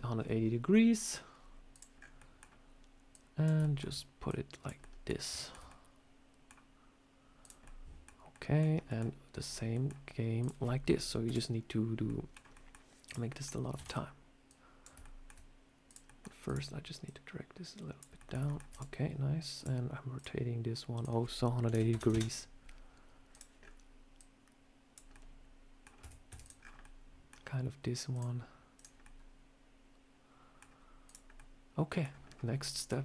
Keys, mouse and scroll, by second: 1.6 click, 1.8 scroll up 4, 2.1 middle click, 3.0 click, 3.5 shift+middle click, 4.2 click, 4.7 middle click, 5.2 shift+middle click, 5.6 middle click, 7.3 click, 7.5 middle click, 8.2 middle click, 8.5 scroll down 2, 8.8 middle click, 9.3 click, 9.6 middle click, 10.3 click, 11.1 Delete, 11.9 middle click, 12.3 scroll down 1, 12.4 middle click, 12.9 click, 13.2 middle click, 13.7 shift+d, 14.4 click, 14.9 shift+middle click, 15.7 click, 15.9 middle click, 16.3 click, 16.9 click, 18.1 middle click, 18.3 shift+middle click, 18.6 click, 19.4 click, 20.1 click, 20.8 click, 23.2 click, 23.5 scroll up 3, 24.1 click, 25.0 middle click, 25.9 Tab, 26.2 Tab, 26.3 click, 26.5 scroll down 4, 26.7 middle click, 28.0 click, 28.9 middle click, 30.9 click, 31.2 middle click, 32.1 scroll up 2, 32.5 middle click.